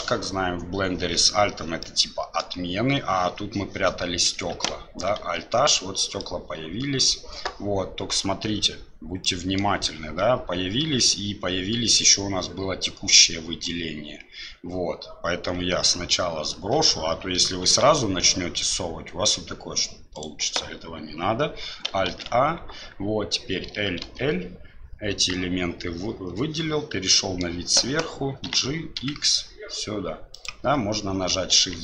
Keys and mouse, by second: 2.0 middle click, 5.2 alt+h, 6.2-7.5 middle drag, 9.3 click, 22.1 alt+a, 23.7 l, 26.1 KP_7, 27.2 shift+click, 28.5 g, 31.6 shift+z.